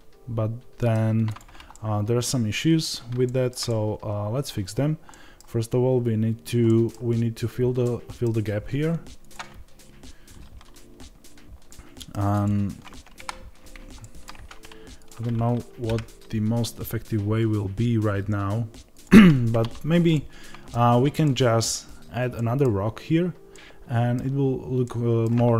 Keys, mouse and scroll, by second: 1.1 click, 1.6-9.1 middle drag, 9.1-10.3 drag, 10.3 Tab, 11.5 middle click, 12.2 click, 13.0 KP_7, 13.9 shift+middle click, 14.2 Tab, 14.8 click, 20.0-21.1 middle drag, 20.8 Tab, 23.4-25.5 middle drag.